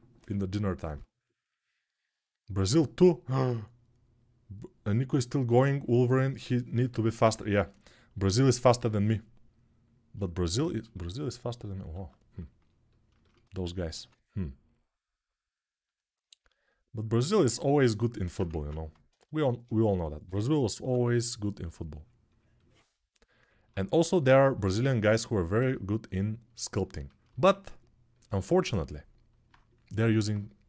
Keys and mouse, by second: 10.2-11.7 ctrl+alt+right drag, 11.7 alt+q, 11.7-16.8 alt+drag, 13.7 q, 16.8-19.1 right drag, 18.2 ctrl+Tab, 19.1-30.6 alt+drag, 19.6 6, 20.0 ], 20.5 ], 20.6 ].